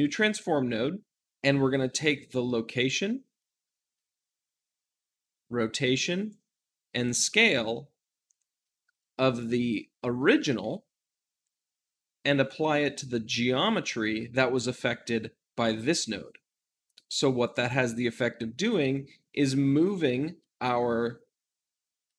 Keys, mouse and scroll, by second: 0.0-22.1 drag.